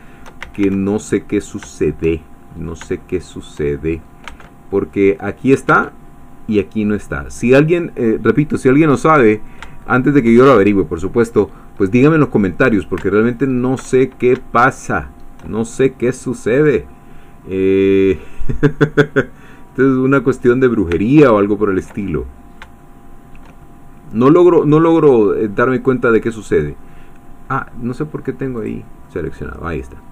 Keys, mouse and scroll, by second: 0.0 shift+click, 0.4 shift+a, 1.0 shift+middle click, 1.6 shift+click, 2.5-2.8 scroll up 1, 3.0 shift+click, 4.4 Tab, 7.2 middle click, 7.2 scroll down 1, 7.6 middle click, 7.6 scroll, 8.9-10.4 drag, 10.6-11.0 shift+scroll up 3, 12.2 click, 13.4 alt+shift+click, 14.0-14.3 alt+shift+scroll down 2, 14.5 shift+click, 18.5-20.9 drag, 21.0-22.0 ctrl+drag, 22.1 ctrl+click, 23.9 click, 25.0 scroll down 1, 25.6 scroll down 1, 26.1 click, 28.6 click, 29.0 click, 30.0-30.1 scroll up 1.